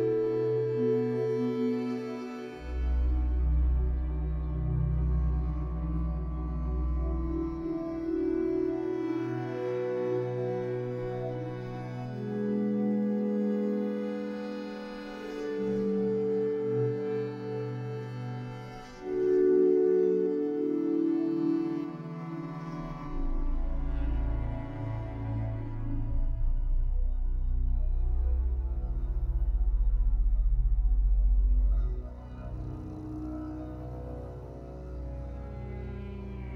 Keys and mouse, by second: 0.4 s, 2.4 x, 3.9 Tab, 4.3 Tab, 4.7 Tab, 5.2 Tab, 5.4 Tab, 5.9 x, 6.7 Tab, 6.9 Tab, 7.7 x, 8.7 x, 9.9 middle click, 10.1 Tab, 10.4 Tab, 10.8 shift+middle click, 11.4 ctrl+r, 14.8 ctrl+r, 17.5 Tab, 18.1 Tab, 18.5 ctrl+z, 18.9 ctrl+z, 19.0 ctrl+z, 19.6 ctrl+r, 22.9 ctrl+r, 25.2 middle click, 26.3 ctrl+r, 28.3 middle click, 29.1 shift+middle click, 29.8 ctrl+r.